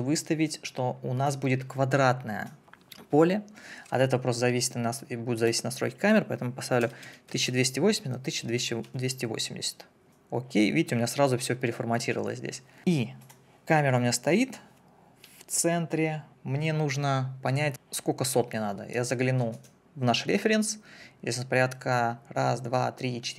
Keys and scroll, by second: 6.8 1, 7.0 2, 7.5 0, 8.8 Delete.